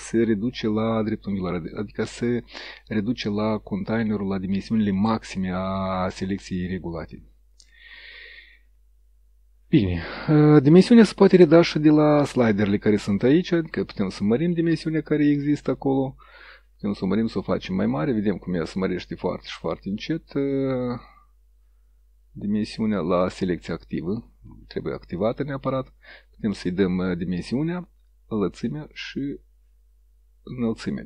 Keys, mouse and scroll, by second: 12.0 click, 16.1 click, 23.0 click, 25.2 click, 28.8 click.